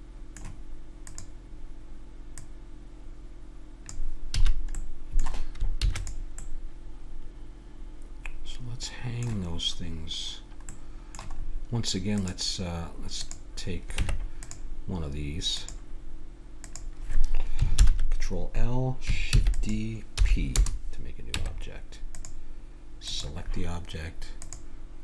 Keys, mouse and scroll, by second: 1.0-4.2 drag, 4.4 a, 4.8-8.2 middle drag, 5.8 ctrl+s, 10.7-12.2 middle drag, 12.2-14.0 right drag, 14.0 Tab, 16.7 right click, 17.8 ctrl+l, 19.3 shift+d, 20.2 p, 21.4 Tab, 22.3 Tab, 23.1-25.0 drag.